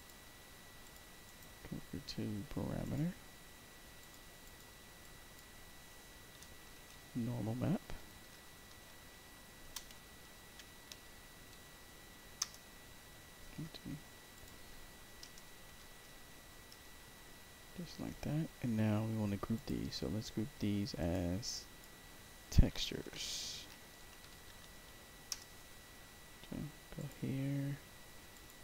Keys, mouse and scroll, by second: 0.7 click, 1.2 click, 2.7 click, 3.9 click, 4.3 click, 4.9 click, 6.6-11.4 typing, 12.3 Return, 14.3 click, 15.1 BackSpace, 15.7 p, 16.6 Return, 17.5-17.9 scroll down 2, 18.5 scroll up 2, 19.5 click, 20.9 click, 21.4 click, 22.6-25.0 typing, 25.2 Return, 26.9 click, 28.2 click.